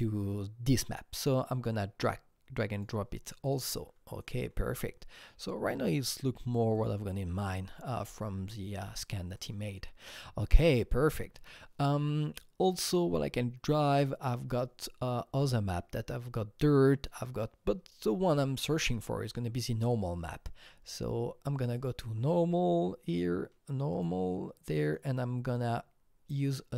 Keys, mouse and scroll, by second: 0.7-4.2 drag, 4.2-6.7 drag, 6.7 click, 7.9-9.3 scroll up 10, 9.4 click, 11.3 alt+Tab, 19.8-20.2 drag, 20.2 scroll down 1, 21.8 click, 23.1 click, 23.9-26.7 drag.